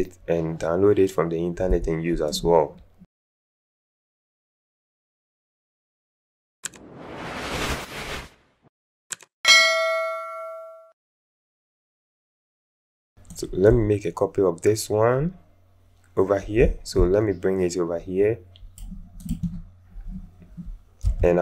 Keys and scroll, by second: 10.1 space, 21.3 t.